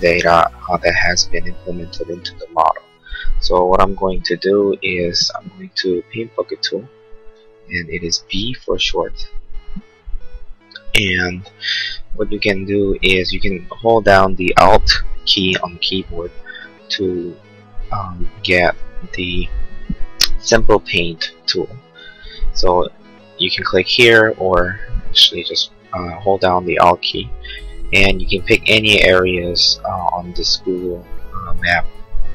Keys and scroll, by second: 8.5 b.